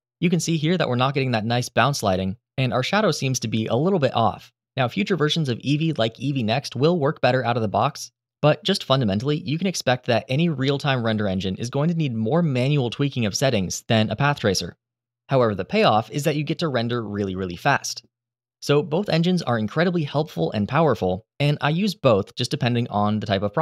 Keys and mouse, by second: 17.2-17.7 middle drag.